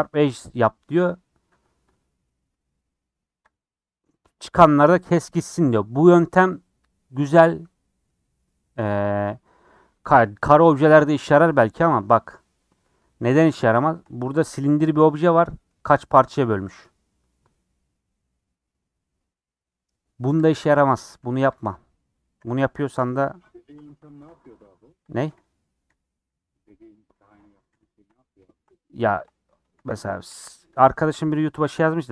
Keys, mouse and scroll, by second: 0.0-1.2 drag, 3.5 click, 4.1 scroll down 2, 12.1 shift+middle click, 12.3 scroll up 4, 13.1 shift+middle click, 14.1 scroll up 3, 14.9-20.4 middle drag, 20.4 click, 20.6 middle click, 21.5 alt+click, 22.0 scroll down 3, 22.2 middle click, 22.9 /, 23.7 Tab, 24.0 shift+middle click, 24.4 click, 24.6-25.5 scroll up 3, 25.5 click, 25.8 /, 26.2 /, 26.6 scroll up 3, 27.0 scroll down 1, 27.7 /, 28.0 scroll down 3, 28.4 shift+middle click, 28.7 scroll down 2, 29.1 shift+middle click, 29.7 a, 30.0 Tab, 30.3 a, 30.7 click.